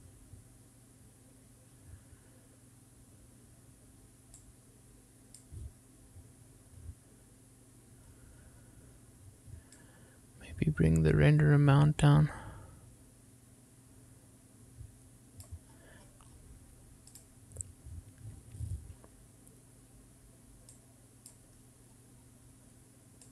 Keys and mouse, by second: 5.6-6.6 drag, 11.0-16.7 drag, 18.4-19.8 drag, 21.9 click.